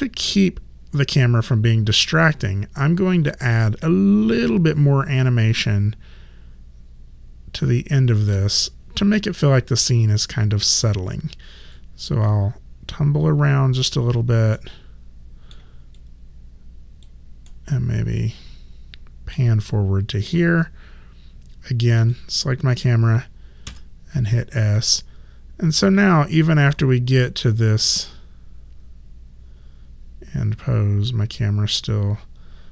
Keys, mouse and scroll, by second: 3.5 click, 11.7 alt+click, 14.6 alt+middle click, 16.0 alt+click, 17.5 alt+middle click, 22.0 click, 23.7 s, 24.8 click.